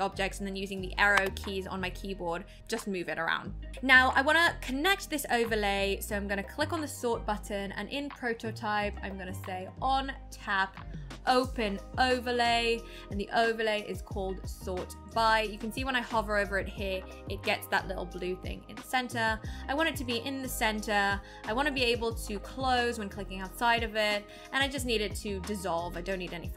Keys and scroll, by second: 1.1 Up, 1.1 Down.